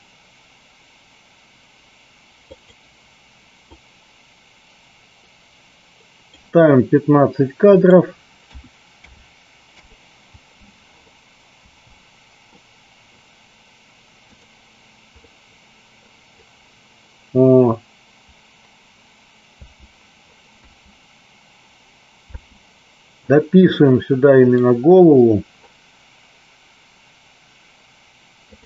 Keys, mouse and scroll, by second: 3.6-6.3 drag, 7.7-9.8 drag, 11.5 space, 15.2 middle click, 19.5 space, 23.8-24.5 middle drag.